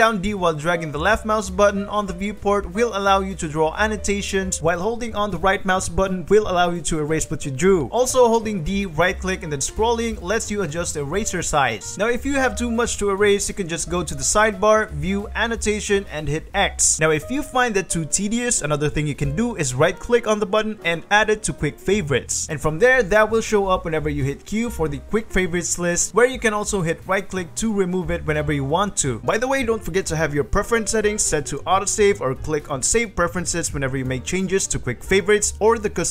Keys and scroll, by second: 7.2 d, 26.1 q, 26.8 Escape, 27.8 q.